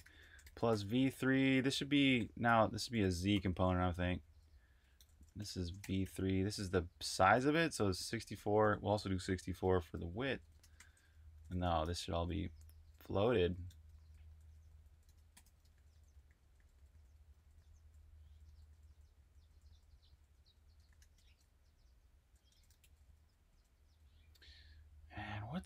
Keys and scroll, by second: 0.0-2.0 typing, 3.4-12.0 typing, 13.2-15.6 typing, 17.4-25.6 typing.